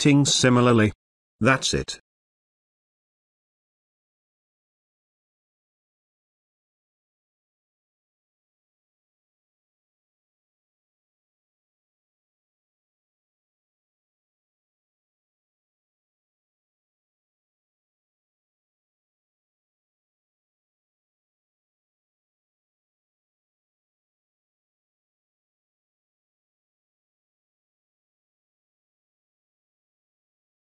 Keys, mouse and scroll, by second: 1.3 b, 3.8 d, 4.4-5.3 click, 5.4 z, 8.8-20.9 drag, 23.3 space, 23.5-24.4 ctrl+drag, 26.8-27.4 click, 27.4 space, 27.5-28.1 ctrl+drag, 29.1 ctrl+d, 29.4 space, 29.6-30.6 ctrl+drag.